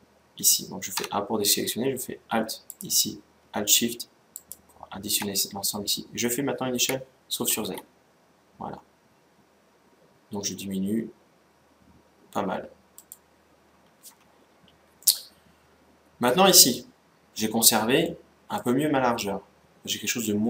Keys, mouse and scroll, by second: 0.7 a, 2.4-5.8 right drag, 6.5 s, 14.7-16.6 middle drag, 17.8-19.5 middle drag.